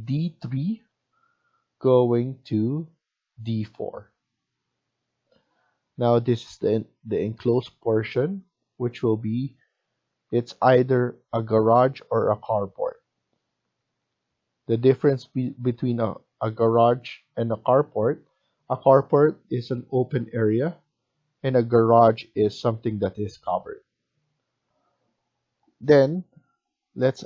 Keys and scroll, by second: 24.6 F1, 25.8 Escape, 26.4 Escape.